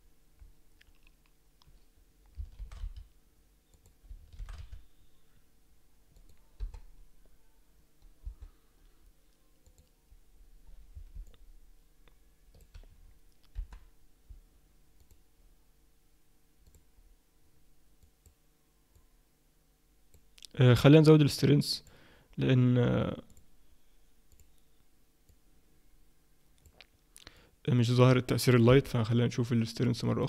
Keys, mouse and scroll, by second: 0.8 scroll up 2, 3.2 shift+d, 5.0 shift+d, 6.6 KP_0, 8.2 KP_0, 9.6 click, 11.2 middle click, 13.0-13.6 scroll down 1, 13.6-14.2 scroll down 1, 13.6 KP_1, 15.0 click, 21.7 click, 23.3 click, 28.7 KP_0, 30.1 click.